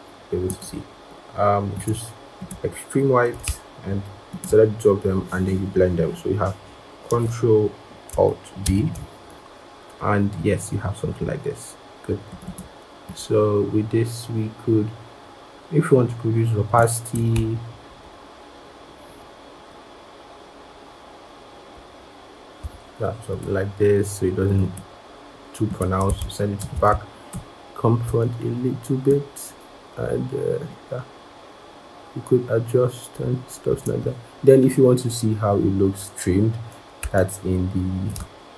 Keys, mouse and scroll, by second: 4.2 shift+click, 8.5 ctrl+alt+b, 12.3 double click, 17.6 shift+Down, 17.7 shift+Down, 17.9 shift+Down, 18.4 shift+Up, 18.6 shift+Up, 18.9 shift+Up, 19.4 shift+Down, 21.6 shift+Down, 24.5 double click, 26.4 ctrl+shift+[, 27.2 ctrl+], 37.9 shift+click.